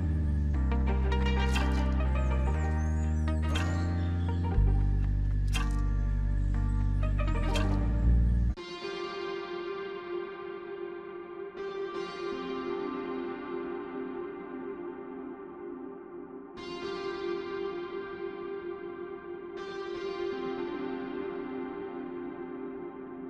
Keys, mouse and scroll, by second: 0.7 alt+middle click, 4.7 w, 15.5 right click, 20.2 double click, 20.3 double click.